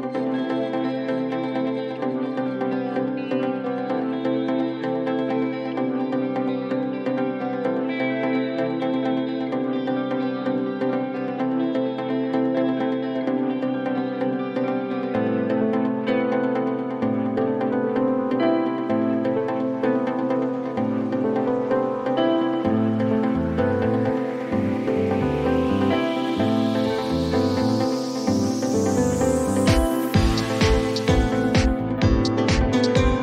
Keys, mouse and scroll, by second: 0.7 click, 3.3 click, 4.0 BackSpace, 5.3 click, 8.2 click, 9.2 click, 9.3-12.6 typing, 14.0 click, 14.2 click, 16.3 right click, 18.6 click, 21.1-26.1 typing, 30.9 click.